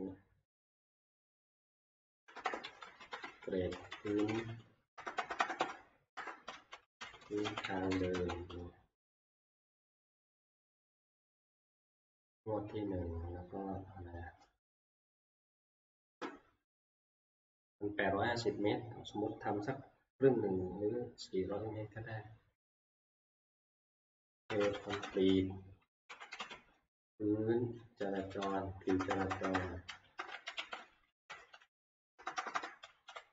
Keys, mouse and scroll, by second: 1.3-8.7 typing, 23.5-26.9 typing, 28.9-33.3 typing.